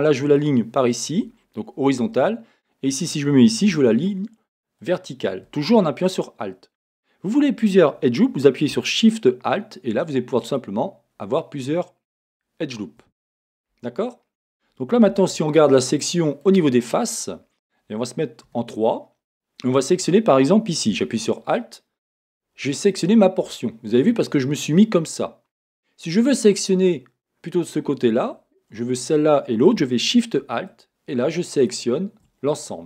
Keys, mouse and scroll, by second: 0.3 alt+click, 2.0 a, 4.8 click, 10.4 alt+shift+click, 12.2 alt+shift+click, 13.3-14.0 scroll down 1, 14.0-15.1 scroll up 1, 15.1 a, 15.9-21.4 middle drag, 18.5 3, 21.4 click, 22.9-30.7 middle drag, 30.7 alt+shift+click, 31.5 alt+shift+click, 31.7-32.8 middle drag.